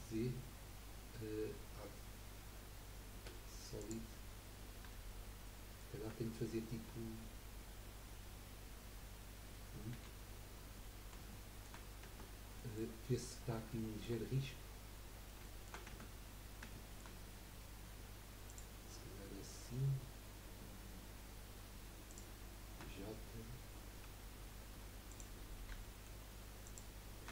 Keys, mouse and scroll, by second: 3.8 click, 4.4 scroll down 2, 4.9-8.0 shift+middle drag, 9.9 1, 10.7-12.0 middle drag, 12.0 Tab, 12.5 middle click, 13.4-13.7 scroll up 2, 13.7-14.7 shift+middle drag, 14.7-15.4 scroll down 5, 15.4 shift+middle click, 15.9 Tab, 16.3 scroll up 1, 16.7 shift+middle click, 17.1-17.8 scroll up 1, 18.5 click, 22.1 shift+click, 25.1 click, 25.8 shift+middle click, 26.6 shift+click.